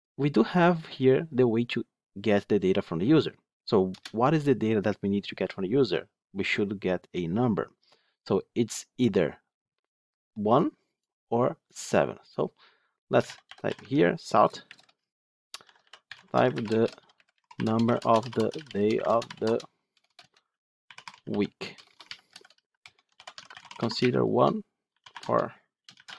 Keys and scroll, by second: 13.7 Tab.